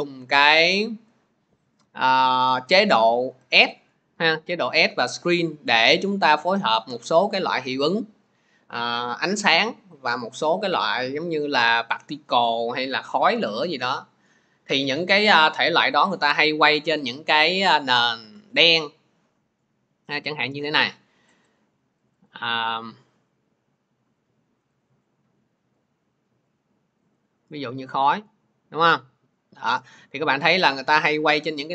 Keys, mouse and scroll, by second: 1.0 click, 6.6 click, 16.7 click, 17.1 alt+Tab, 17.7 alt+Tab, 18.0 alt+Tab, 20.1 click, 20.3-22.2 click, 24.7 click, 25.7 click, 27.1 click.